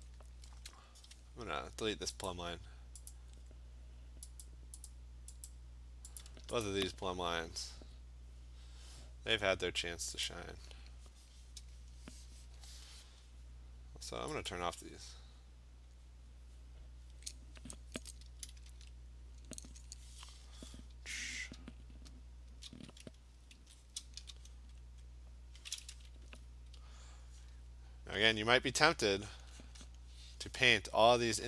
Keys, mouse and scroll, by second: 0.1 click, 2.3 click, 3.1 click, 4.5 click, 4.9 click, 5.5 click, 6.2 click, 6.7 shift+click, 6.9 shift+click, 7.8 Delete, 10.3 click, 13.8 click, 14.5 click, 21.5-22.5 click, 22.1-22.5 scroll, 22.5 click, 22.7 click, 23.6 ctrl+z, 24.6 click, 25.0 click, 25.9 click, 26.1 click, 26.8-27.4 ], 28.4 click, 29.0 click, 29.4 click, 29.7 click, 29.9 click.